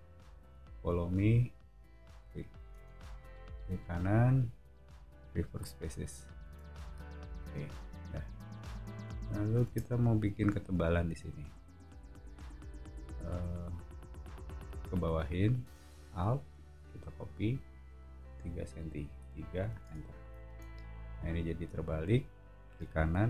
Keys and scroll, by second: 2.7 space, 6.4 space, 7.0 Escape, 7.7 o, 9.6 space, 12.2 p, 19.2 3, 19.8 Return, 20.4 space.